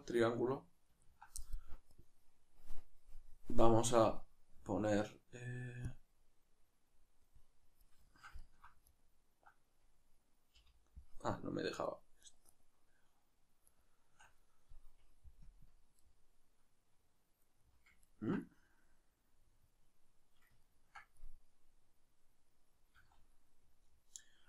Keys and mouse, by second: 5.9 click, 8.1 ctrl+shift+middle click, 8.8 right click, 11.8 shift+right click, 13.7 shift+right click, 15.4 KP_Decimal, 16.0-24.4 middle drag, 23.0 z.